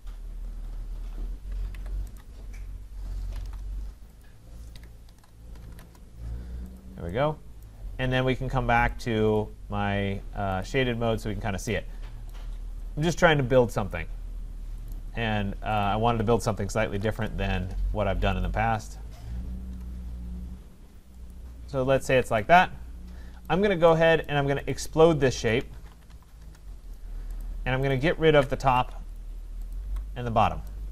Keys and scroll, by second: 1.7 Escape, 3.4 Return, 17.1 Return, 22.0 Escape, 26.4 Return, 28.6 Delete.